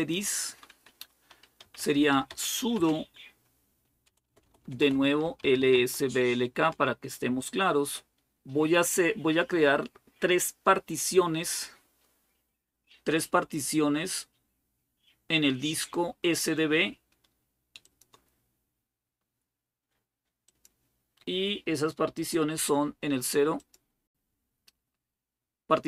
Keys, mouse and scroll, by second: 0.7-1.4 scroll up 1, 1.1-2.6 typing, 3.8-6.2 typing, 6.3 Return, 8.7 typing, 13.9-17.6 scroll up 2, 17.6 click, 20.4 click, 23.4 click.